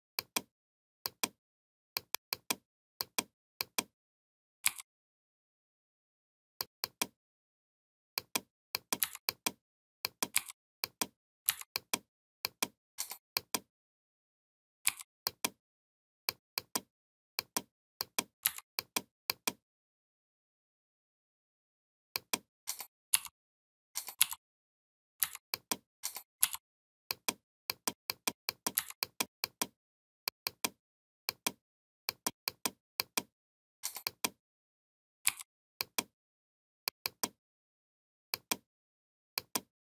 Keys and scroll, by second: 4.4 i, 8.8 v, 10.2 i, 14.6 i, 18.3 v, 22.9 shift+n, 24.0 shift+m, 25.0 v, 26.2 shift+m, 28.6 v, 35.1 i.